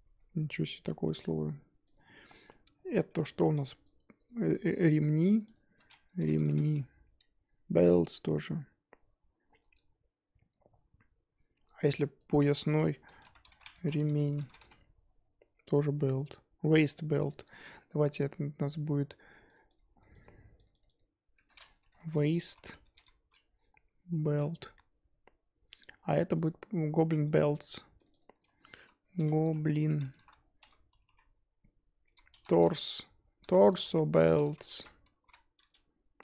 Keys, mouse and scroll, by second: 1.0 middle click, 1.9 click, 2.5-3.5 middle drag, 3.5 g, 19.7 click, 20.7-25.7 drag, 26.4 click, 28.1-35.6 drag.